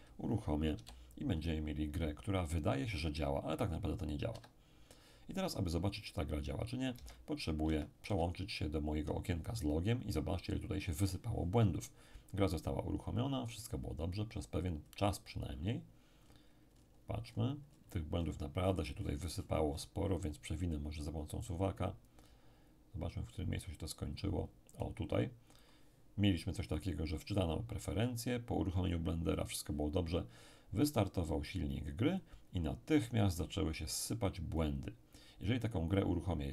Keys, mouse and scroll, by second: 0.7 p, 4.3 Escape, 6.9 alt+Tab, 7.6 alt+Tab, 8.0 alt+Tab, 12.1-20.7 scroll up 1, 21.4-26.5 drag, 27.2-30.4 drag, 30.8-33.1 drag, 35.6 click.